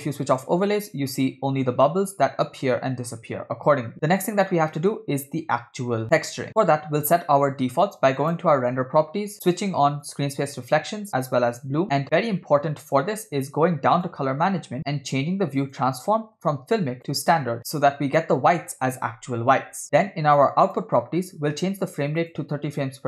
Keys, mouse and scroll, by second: 1.0 space, 8.2 click, 9.1-9.5 scroll up 2, 10.1 click, 11.6 click, 11.9-13.9 scroll down 10, 14.0 click, 14.4-15.2 scroll down 3, 15.7-17.1 drag, 19.8-20.6 scroll up 7, 20.7 click, 21.8 click, 22.2-23.0 drag.